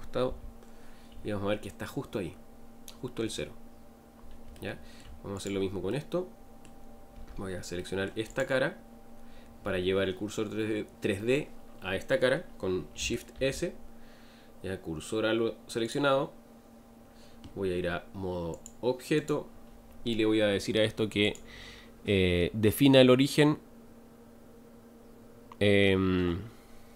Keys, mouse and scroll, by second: 4.5 shift+middle click, 5.4 click, 5.9-7.1 middle drag, 7.1 Tab, 7.7 middle click, 8.3 click, 19.2-26.9 drag.